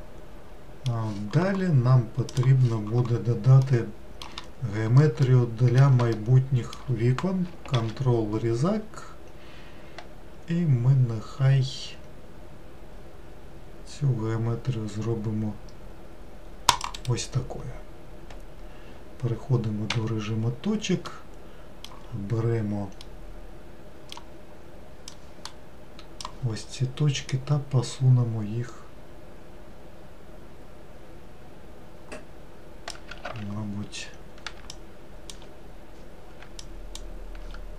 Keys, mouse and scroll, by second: 3.7-4.8 middle drag, 4.8-5.3 scroll up 1, 5.3-7.8 middle drag, 7.8 ctrl+r, 21.1-25.1 middle drag, 25.1-27.6 drag, 33.3 ctrl+z, 34.7 shift+click, 36.7 shift+click.